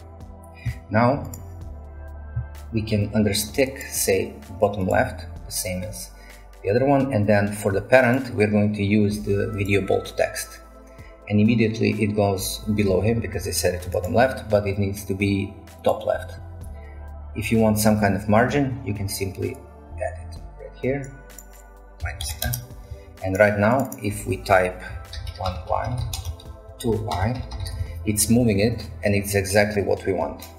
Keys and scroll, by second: 21.8-22.7 typing, 24.9-28.2 typing, 30.4-30.5 typing.